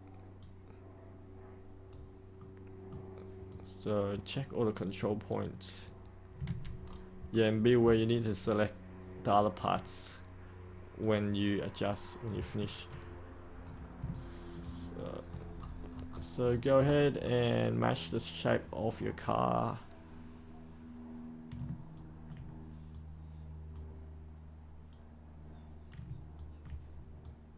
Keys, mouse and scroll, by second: 0.3-2.3 drag, 2.3 middle click, 3.4-4.5 right drag, 4.8 click, 6.4 ctrl+z, 6.7 scroll down 1, 7.3 middle click, 8.4 ctrl+right click, 11.0 click, 12.8 ctrl+right click, 14.1 ctrl+right click, 14.9 middle click, 15.5-16.0 scroll down 1, 16.0-18.0 scroll up 1, 18.0 right click, 19.7-21.5 drag, 21.9 ctrl+right click, 22.9 right click, 24.9 click, 26.3 ctrl+right click, 27.2 right click.